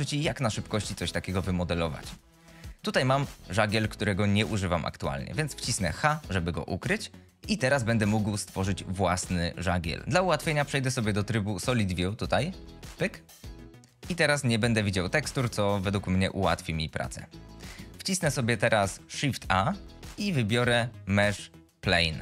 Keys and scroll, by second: 6.0 h, 14.2 F22, 19.7 shift+a.